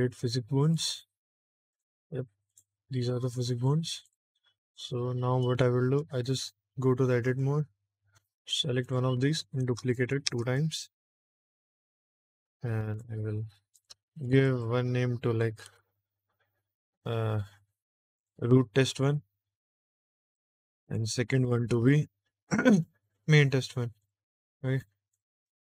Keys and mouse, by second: 0.5 click, 1.6 click, 2.4 click, 4.0 click, 5.5 shift+middle click, 7.2 Tab, 8.7 click, 9.5 shift+d, 9.9 click, 10.2 shift+d, 10.3 click, 12.4 click, 13.6 click, 14.2 click, 14.4-20.2 drag, 20.6 click, 20.7-23.9 drag, 24.7 click, 25.0 click.